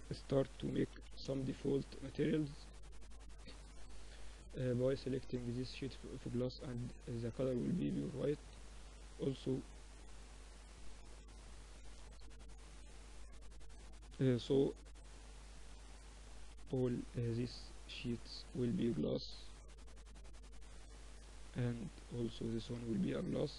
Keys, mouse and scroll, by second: 0.1 s, 1.5-3.4 drag, 5.6-7.7 drag, 7.3 z, 8.3 z, 11.5-13.3 drag, 13.1 h, 13.5 z, 15.6 z, 17.0 z, 20.2 z, 21.6 z, 22.3 middle click.